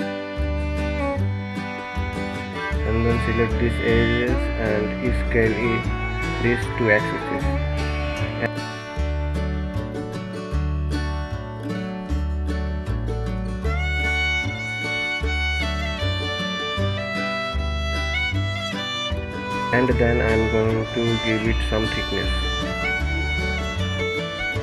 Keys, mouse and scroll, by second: 2.7 click, 3.7 s, 6.9-10.0 middle drag, 12.3 KP_1, 14.2-15.0 scroll down 2, 15.0-16.8 scroll down 1, 16.8 click, 20.2-21.2 drag, 22.8-24.6 drag.